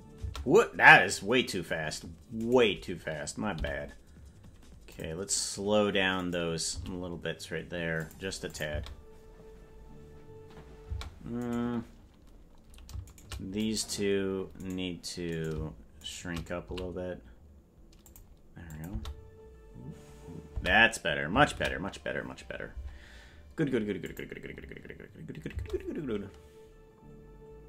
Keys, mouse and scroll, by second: 0.2 space, 2.3-3.5 right drag, 3.5 g, 6.2 right click, 6.6 g, 8.5-10.8 drag, 8.7 space, 11.0 space, 11.4-13.4 right drag, 13.6 click, 14.5-16.6 right drag, 16.6 s, 18.7-25.0 drag, 18.9 space, 20.6 space, 24.9 ctrl+s, 25.4 space.